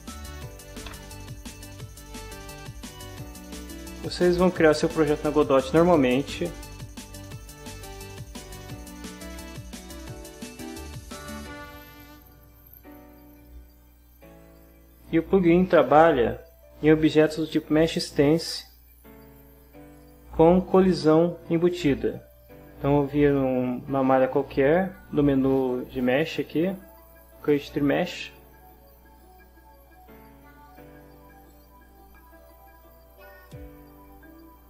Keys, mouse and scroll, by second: 0.1 Down, 0.9 Return, 3.8 click, 11.6 click, 19.9 click, 26.1 click, 28.1 click, 29.2 click, 30.1-31.1 drag, 31.5 click, 32.4 click, 33.4 click.